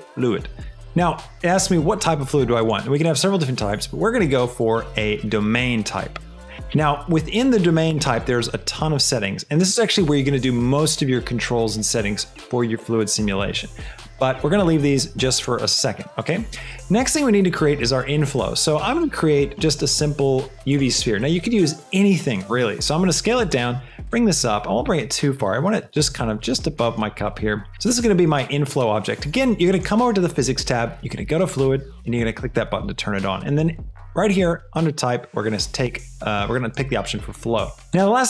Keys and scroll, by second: 18.7 shift+a, 21.7 s, 22.8 z, 23.9 g, 26.1 shift+g, 27.7 shift+s.